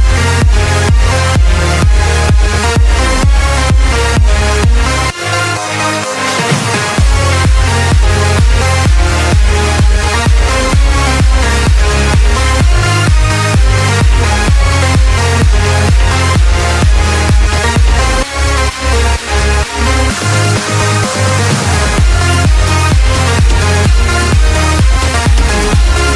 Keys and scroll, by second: 2.3 ctrl+z, 3.2 ctrl+z, 4.0 space, 4.4 space, 5.3 ctrl+space, 7.7 x, 8.6 space, 9.1 alt+space, 9.4 ctrl+z, 11.4 ctrl+z, 12.2 5, 13.9 space, 14.2 space, 14.8 ctrl+z, 15.6 ctrl+0, 16.3 ctrl+z, 18.3 ctrl+z, 20.4 ctrl+z.